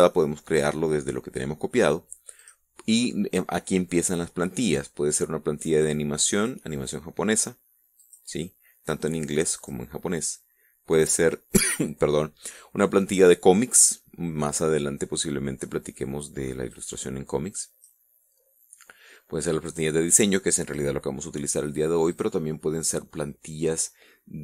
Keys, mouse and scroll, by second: 2.6 click, 6.6 click, 8.2 click, 9.8 click, 11.1 click, 16.9-18.2 drag, 19.8 click, 22.3 click.